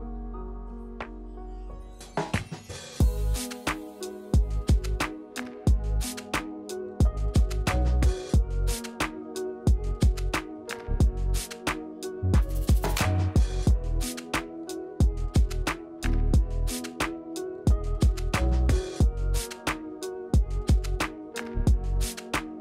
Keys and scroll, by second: 1.1 w, 2.6 w, 5.0 q, 8.3 r, 11.4 q, 17.7 Tab, 20.8 e, 22.5 r.